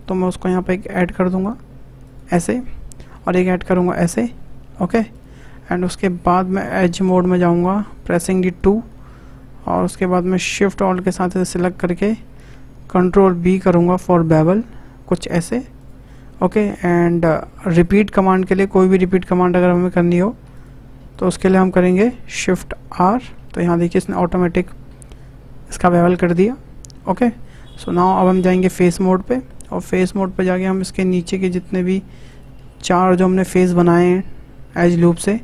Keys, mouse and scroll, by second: 6.7 3, 8.6 alt+shift+click, 9.6-11.2 middle drag, 11.2-11.6 scroll up 1, 11.6-13.4 shift+middle drag, 13.4 ctrl+b, 17.8 alt+click, 18.3 shift+click, 18.9 alt+shift+click, 19.6 click, 20.5 click, 21.1 alt+shift+click, 21.7 alt+shift+click, 23.0 shift+r, 23.8-26.8 middle drag, 27.2-28.7 middle drag, 28.7 click, 29.5-30.9 middle drag, 30.9 click, 32.3 shift+click, 32.8-33.9 shift+middle drag, 33.9 shift+click, 35.0 shift+click.